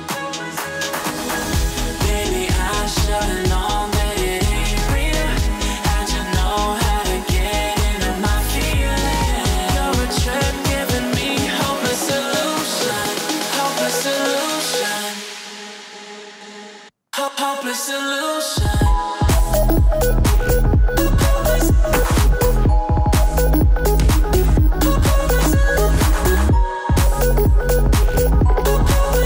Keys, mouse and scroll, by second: 0.7 click, 3.1 click, 5.8-6.4 alt+scroll down 2, 6.4-6.9 alt+scroll up 2, 6.9 click, 8.7 drag, 10.4 4, 11.3 click, 13.2 click, 14.9 alt+scroll down 1, 15.2-15.6 alt+scroll up 1, 16.6 click, 17.4 2, 18.2 click, 20.1 click, 20.7 3, 21.3 click, 24.4-24.7 click, 25.1 Delete, 26.2 click, 27.8-28.3 alt+scroll down 2, 28.3 click, 28.8-29.2 alt+scroll up 2.